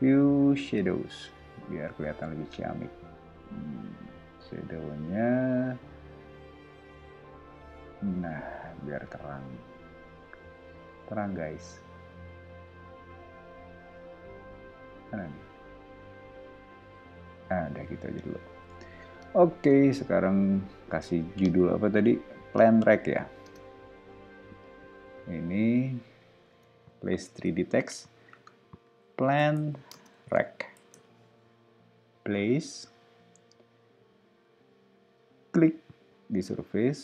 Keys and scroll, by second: 18.7 o, 23.4 space, 26.5 super+a, 28.6-31.4 typing.